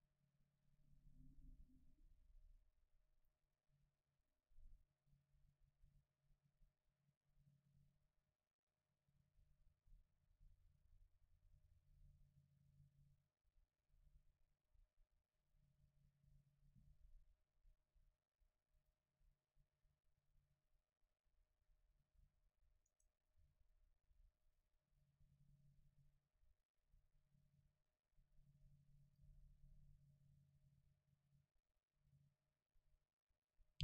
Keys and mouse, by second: 0.6-3.2 middle drag, 3.2-7.1 drag, 15.5-20.6 middle drag, 18.8-20.7 drag, 22.9-24.8 right drag, 24.5-28.0 drag, 30.6 middle click, 30.8-33.7 drag.